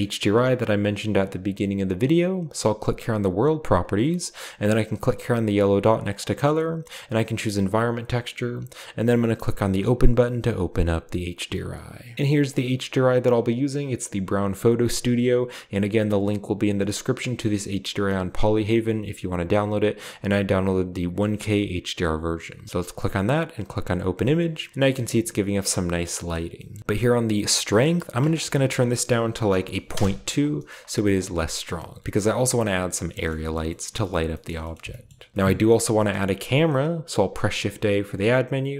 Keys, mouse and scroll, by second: 3.1 click, 3.8 click, 4.1 click, 6.2 click, 7.7 click, 12.2 typing, 12.5-13.2 drag, 23.6-24.3 drag, 24.3-24.7 scroll down 1, 24.7-26.3 middle drag, 26.1-26.8 scroll up 2, 28.2 click, 29.5-29.8 typing, 29.9 Return, 31.0 middle click, 33.0-33.6 scroll down 1, 33.2-35.3 shift+middle drag, 33.6-35.2 shift+scroll up 2, 35.2 scroll down 1, 35.3 ctrl+s, 37.4 shift+a.